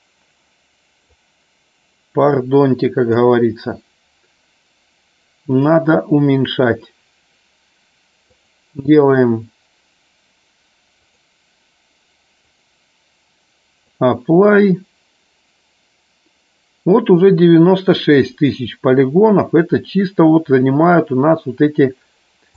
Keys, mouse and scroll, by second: 2.2-11.8 drag, 12.3-19.4 drag.